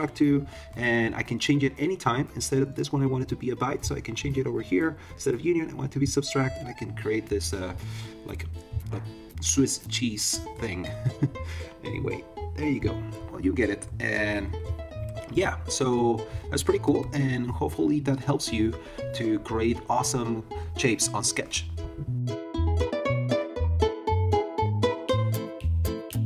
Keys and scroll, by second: 0.5 super+z, 13.8 super+-, 16.5 super+-.